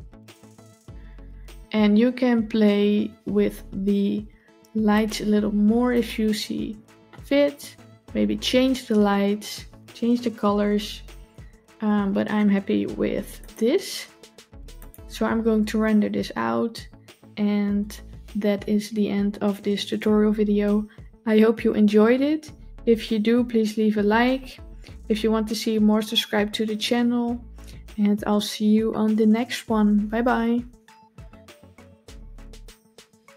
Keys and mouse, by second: 4.9 click, 13.3 click, 14.6 click.